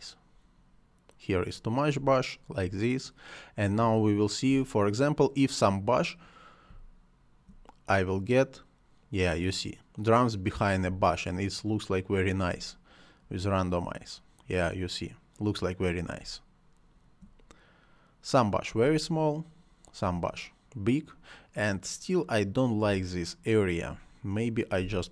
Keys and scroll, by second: 1.9 space, 3.7 space, 6.6 space, 10.8 space, 16.1 space, 18.7 space, 22.8 space.